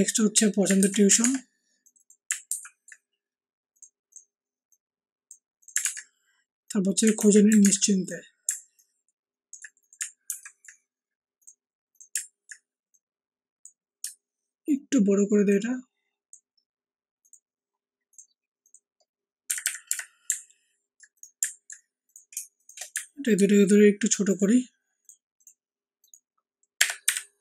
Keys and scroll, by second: 0.7 ctrl+c, 1.2 ctrl+alt+Tab, 2.4 ctrl+v, 5.8 alt+Tab, 7.1 ctrl+c, 7.6 ctrl+alt+Tab, 10.2 ctrl+alt+v, 19.4 Up, 19.6 Up, 19.8 Up, 26.8 Up.